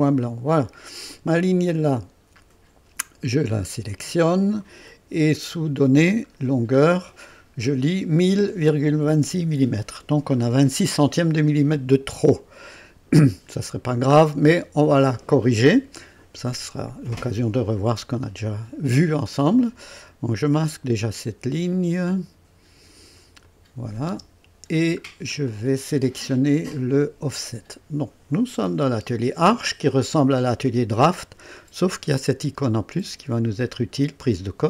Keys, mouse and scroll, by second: 0.0 click, 1.7 click, 3.5-4.8 drag, 5.6 click, 6.2-6.7 scroll down 2, 11.3-11.8 scroll down 2, 12.1 right click, 13.4-14.0 scroll down 3, 14.4-15.3 right drag, 23.4 click, 24.1 space, 25.1 scroll down 1, 25.5 right click, 27.2 click.